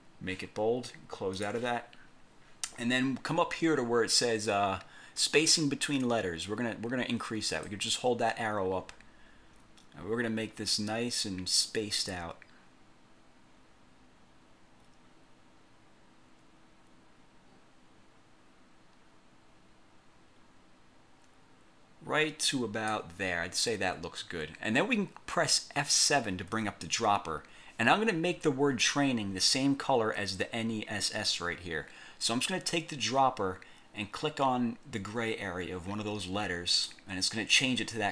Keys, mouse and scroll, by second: 1.5 click, 7.8-23.2 drag, 26.6 F7, 36.8 click.